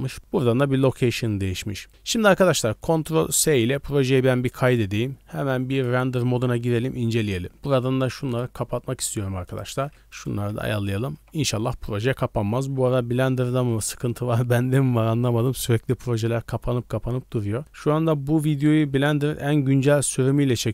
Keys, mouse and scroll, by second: 1.9 scroll down 1, 2.5 middle drag, 3.7 ctrl+s, 4.5 click, 5.7 click, 8.3 click, 9.0-9.6 drag, 10.5 ctrl+s, 11.2 z.